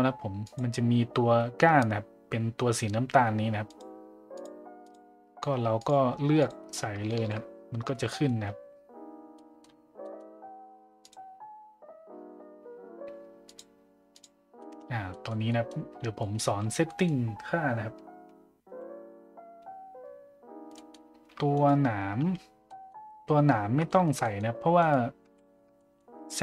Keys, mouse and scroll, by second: 0.4-3.8 drag, 4.4 click, 5.8 click, 7.2 shift+z, 7.9 a, 8.0 middle drag, 9.3 middle drag, 10.0 middle drag, 11.1 drag, 13.5 click, 14.6 middle drag, 15.1 middle drag, 15.5 middle drag, 16.2 middle drag, 16.8 middle drag, 20.7 middle click, 22.6 middle drag, 23.9 shift+middle drag, 24.2 middle drag, 25.8 middle click.